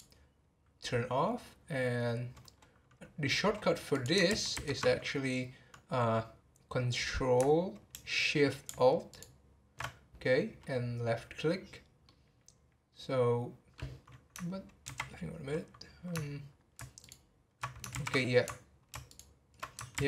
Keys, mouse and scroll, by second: 3.9 click, 4.3 ctrl+z, 4.5 ctrl+z, 9.1 ctrl+alt+shift+click, 12.0-14.8 middle drag, 14.8 ctrl+z, 17.0 ctrl+alt+click, 17.9 ctrl+z, 19.1 ctrl+shift+click, 19.9 ctrl+z.